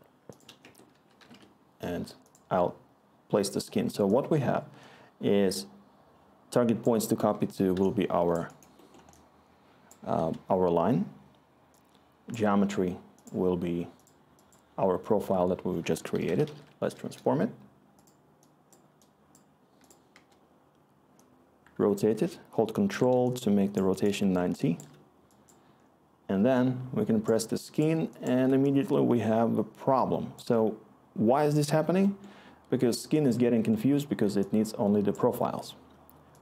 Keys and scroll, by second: 0.6 Tab, 0.6-3.2 typing, 15.8-17.0 typing, 20.1 Return, 23.6-25.2 scroll, 29.9-31.7 scroll.